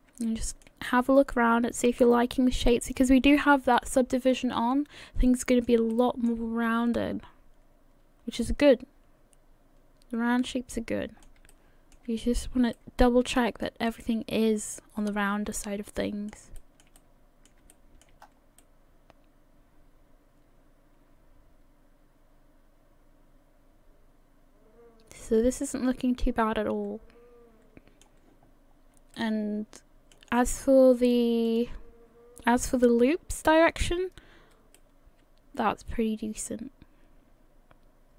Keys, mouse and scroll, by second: 0.2 shift+middle click, 1.0-2.1 scroll down 2, 1.3 middle click, 2.7 shift+middle click, 3.3-3.7 scroll up 5, 3.7 middle click, 5.9 shift+middle click, 6.5-6.9 scroll down 2, 6.9 middle click, 11.5 shift+middle click, 12.4-12.7 scroll down 2, 12.7 middle click, 15.0-15.5 scroll down 2, 15.5 middle click, 16.6 shift+middle click, 17.0 middle click, 17.7 shift+middle click, 18.2-18.6 scroll up 3, 18.6 middle click, 28.7-29.2 scroll down 2, 29.2 middle click, 31.5 click, 33.8-34.3 scroll up 2, 34.7 middle click.